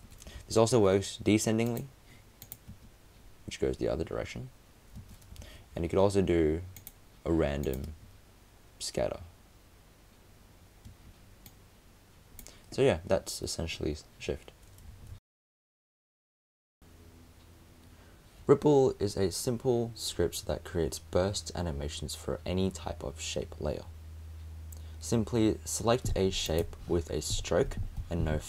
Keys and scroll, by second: 0.3 super+z, 5.3 super+space, 5.4 super+z.